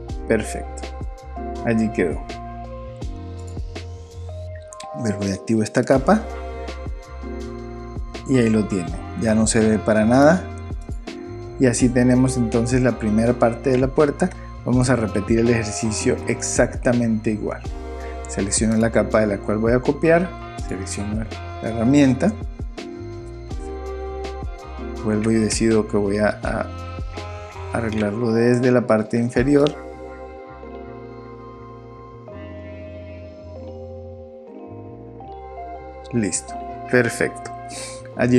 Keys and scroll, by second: 23.4 super+v, 23.7 super+d.